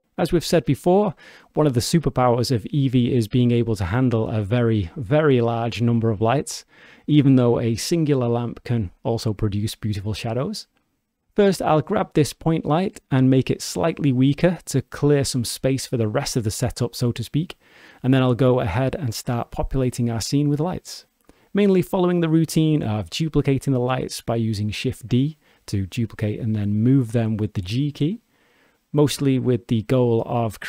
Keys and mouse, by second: 7.7 click, 8.3 click, 9.5 g, 11.2 click, 15.2 click, 16.7-21.7 drag, 24.7 shift+d, 29.5 drag, 29.9-30.6 alt+drag.